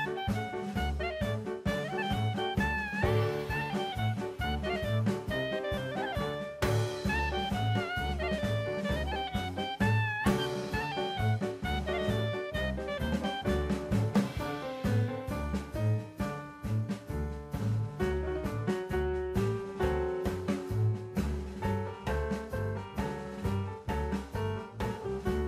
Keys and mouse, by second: 0.7 click, 4.4 middle click, 5.7-6.3 drag, 10.6 click, 11.5-16.8 drag, 17.4 middle click, 21.1 click, 21.9 click, 22.5 click, 22.8-23.3 middle drag, 23.8 shift+a.